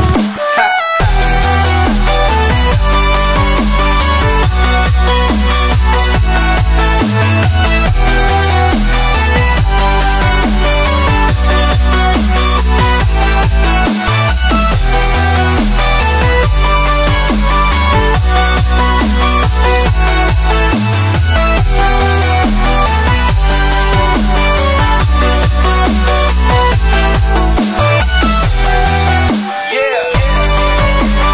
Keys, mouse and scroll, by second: 0.2 click, 0.5-1.5 shift+drag, 1.8 alt+shift+click, 2.7 shift+click, 2.8 shift+click, 3.5-4.5 shift+drag, 4.5 x, 5.9-7.4 drag, 7.4 x, 7.9 scroll down 1, 8.0-9.6 middle drag, 11.3-11.7 scroll down 2, 11.7 middle click, 12.1-13.2 scroll down 2, 12.3 middle click, 13.2 Tab, 13.6 shift+middle click, 14.0 click, 14.2 scroll up 1, 14.3 middle click, 14.4 scroll down 5, 14.8-15.5 middle drag, 15.5 KP_1, 16.1 shift+a, 19.5-20.8 scroll up 8, 19.8 middle click, 20.4 shift+middle click, 20.8 middle click, 20.9-21.2 scroll down 4, 21.2-21.7 middle drag, 21.7 click, 22.2 shift+middle drag, 22.4-23.1 scroll up 2, 23.1-23.5 scroll down 4, 23.5-24.8 shift+middle drag, 24.8-26.4 drag, 26.4 n, 27.4 click, 28.1 KP_Decimal, 28.8 scroll down 3, 29.1-29.7 middle drag, 29.7 KP_0, 30.5 scroll down 1, 30.6-31.0 middle drag, 31.0-31.3 drag.